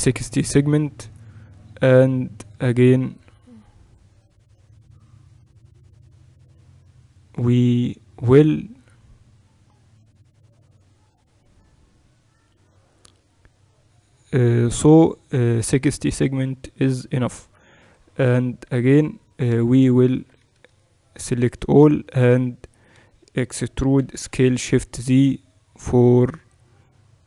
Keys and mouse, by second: 17.8 KP_7, 19.3-20.5 middle drag, 20.1 Tab, 20.5-22.8 a, 21.4-23.2 drag, 23.7 e.